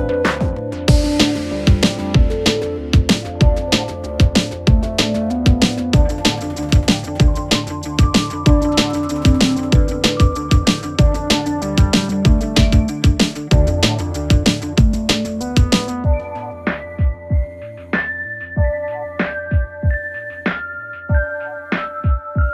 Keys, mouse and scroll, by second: 4.2 shift+click, 8.8 click, 12.7 space, 16.2 space, 17.0-20.4 click, 22.3 u.